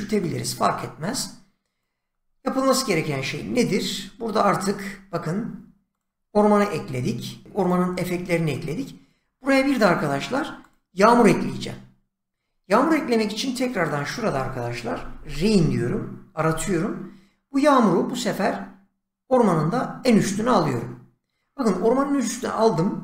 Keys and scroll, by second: 14.6-16.0 typing.